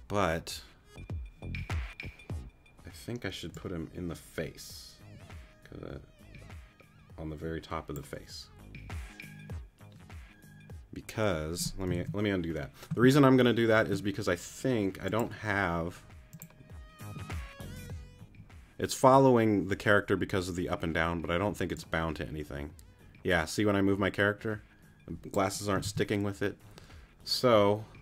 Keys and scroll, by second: 12.6 super+z, 18.2 z, 25.8 super+z.